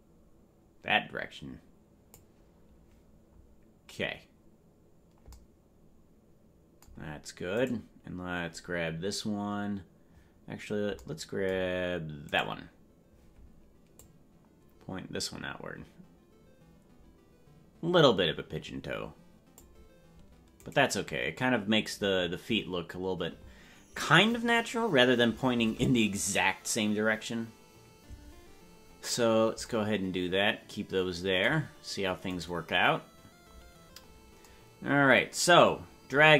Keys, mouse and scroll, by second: 7.8 right click, 12.6-13.9 right drag, 13.9-19.6 drag, 21.0-25.6 right drag, 32.6-34.4 right drag.